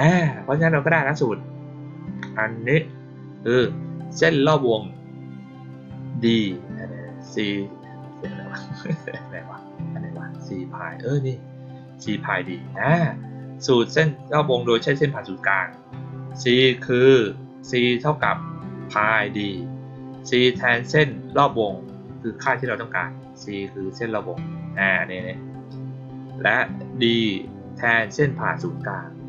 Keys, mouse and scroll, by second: 0.0-1.8 scroll up 4, 2.5-3.0 scroll down 2, 6.8 scroll up 2, 7.9 middle click, 7.9 scroll up 1, 9.1 middle click, 9.1-9.7 scroll down 2, 9.5 middle click, 9.7-11.3 scroll up 2, 10.0-11.3 middle drag, 12.4 middle click, 12.4-12.9 scroll down 1, 23.4 middle click, 24.4 middle click.